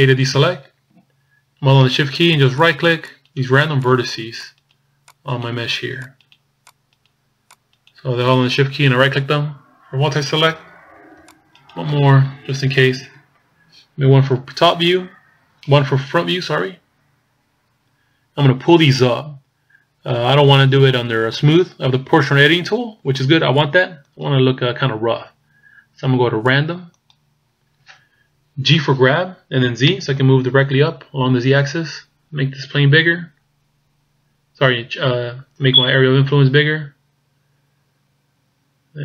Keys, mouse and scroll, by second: 0.3 a, 2.6 shift+right click, 3.2 shift+right click, 3.9 shift+right click, 4.5 shift+right click, 5.2 shift+right click, 6.1 shift+right click, 7.1 shift+right click, 7.6 shift+right click, 11.3 shift+right click, 14.0 KP_1, 16.8-17.2 scroll up 2, 23.7 click, 28.4 g.